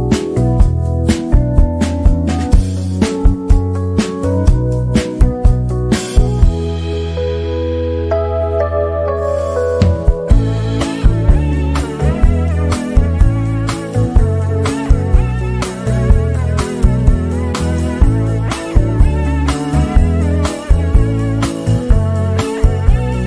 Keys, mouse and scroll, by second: 1.8-3.9 shift+drag, 5.9-11.3 shift+drag, 12.5 shift+scroll down 1, 13.0 z, 13.2-14.6 drag, 16.3 F10, 16.9 click, 16.9 click, 20.6-21.1 shift+scroll down 1.